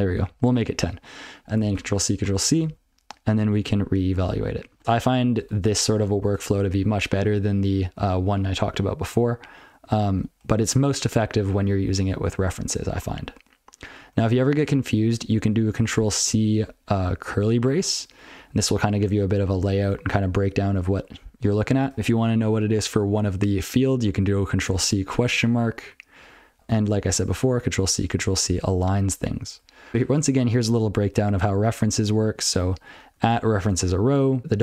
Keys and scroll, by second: 0.1 ctrl+f, 1.7 ctrl+c, 2.4 ctrl+n, 2.9 ctrl+n, 2.9 ctrl+f, 3.6 ctrl+c, 4.3-4.6 ctrl+f, 4.7 ctrl+p, 4.8 n, 4.9 ctrl+p, 5.4 ctrl+/, 5.5 ctrl+p, 5.8 ctrl+a, 6.3 ctrl+p, 6.5 ctrl+n, 6.9 ctrl+n, 7.2-7.7 ctrl+p, 7.9-8.3 ctrl+n, 9.7 ctrl+n, 9.8 ctrl+p, 10.1 ctrl+p, 10.5 ctrl+p, 11.7 ctrl+n, 12.2 ctrl+n, 12.5 ctrl+p, 12.7 ctrl+n, 13.0 ctrl+p, 13.1 ctrl+n, 14.0 ctrl+n, 14.2 ctrl+n, 14.6 ctrl+p, 15.0 ctrl+f, 15.2 ctrl+p, 15.6 ctrl+p, 15.8 ctrl+p, 15.9 ctrl+p, 18.3 ctrl+p, 18.6 ctrl+n, 18.8 ctrl+n, 19.0 ctrl+n, 19.2 ctrl+p, 19.4 ctrl+p, 19.6 ctrl+p, 19.9 ctrl+n, 20.1 ctrl+n, 21.9 ctrl+p, 22.1 ctrl+f, 26.1 ctrl+n, 26.6 ctrl+p, 26.7 ctrl+n, 27.3 ctrl+c, 27.5 ctrl+n, 27.7 ctrl+c, 27.8 ctrl+n, 28.0 ctrl+n, 28.2 ctrl+n, 28.6 ctrl+n, 29.6 ctrl+l, 30.7 ctrl+n, 30.9 ctrl+l, 32.4 ctrl+alt+f, 33.2 ctrl+alt+f, 33.6 ctrl+alt+f, 33.9 ctrl+n.